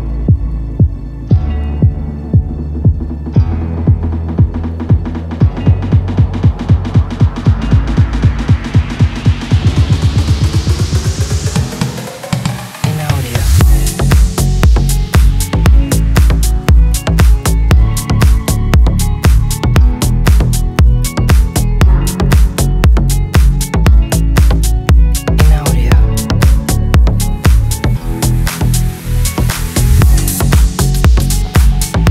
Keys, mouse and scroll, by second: 0.0-0.4 drag, 0.9 shift+d, 2.1 shift+drag, 2.8 shift+a, 3.1 click, 3.7 shift+a, 4.4 shift+a, 4.6 shift+click, 6.1 g, 6.4 shift+z, 6.6 click, 7.3 middle click, 8.9 click, 10.2 click, 11.1 click, 11.9 click, 12.7 shift+click, 15.5 g, 15.6 z, 16.4 z, 16.7 r, 17.2 click, 18.0 g, 18.4 x, 18.8-19.2 drag, 19.2 middle click, 19.5 g, 19.5 y, 19.8 click, 20.3 click, 20.7 shift+t, 21.3-22.2 middle drag, 22.6 ctrl+s, 23.5 ctrl+click, 24.2 click, 24.6 shift+click, 25.6 shift+click, 26.7 click, 26.9 click, 27.3 click, 27.7 shift+click, 31.7 click, 32.0 click.